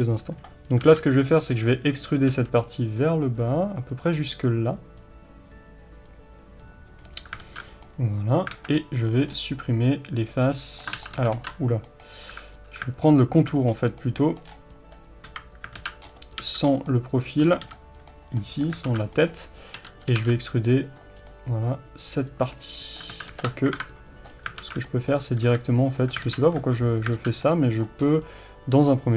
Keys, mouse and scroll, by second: 1.3 b, 7.5 alt+z, 7.7 scroll down 2, 7.9-12.6 middle drag, 8.5 scroll down 1, 8.6 alt+a, 9.3-9.7 scroll up 1, 11.0 ctrl+z, 12.6 click, 13.7 scroll down 1, 14.1-20.0 middle drag, 14.5-15.3 scroll down 1, 15.3 KP_3, 15.8 alt+z, 16.1-16.9 scroll up 1, 17.5 b, 18.4-18.9 scroll down 1, 18.9 alt+z, 19.8 e, 20.0 click, 20.2 g, 21.2 scroll down 1, 21.3-28.8 middle drag, 23.2 ctrl+z, 23.8 KP_3, 24.3-24.7 scroll up 1, 24.7 alt+a, 24.8 scroll down 1, 25.8 b, 26.3 alt+z, 27.0 b, 27.2 alt+z, 28.1-28.6 scroll up 1, 28.8 click.